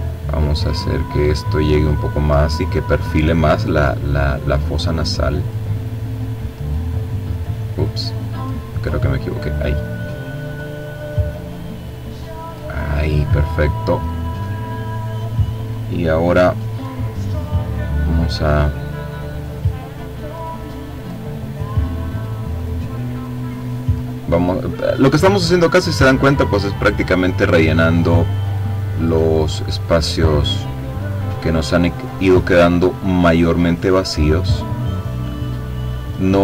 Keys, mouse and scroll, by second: 1.0-2.1 drag, 2.8-4.0 drag, 4.5 click, 5.3-6.9 drag, 7.5 click, 8.6-11.0 drag, 11.3-12.3 scroll down 2, 14.7 click, 18.3-20.1 drag, 20.5 click, 21.5-22.5 drag, 24.6-25.7 drag, 25.8 click, 26.9 click, 27.3-29.5 drag, 29.9 click, 31.6-33.0 drag, 33.4 click, 34.3 click, 35.3 click.